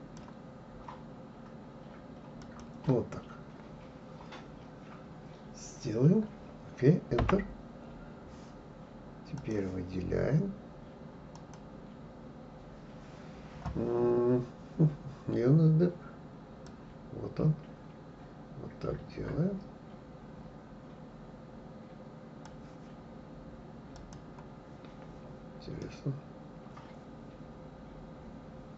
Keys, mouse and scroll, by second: 9.4-11.5 drag, 16.7-19.7 drag, 24.0 click, 25.8-28.7 middle drag.